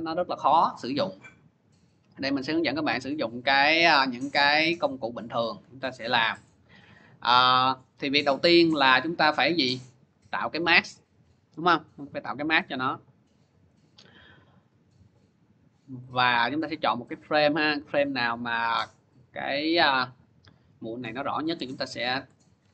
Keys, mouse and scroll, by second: 2.0 click, 5.1-7.0 drag, 8.6 click, 9.6-11.1 scroll, 11.4-11.8 scroll, 13.6 scroll, 14.1 middle click, 15.8-16.2 scroll, 16.2 click, 17.0 scroll, 20.2 click, 22.5 ctrl+y.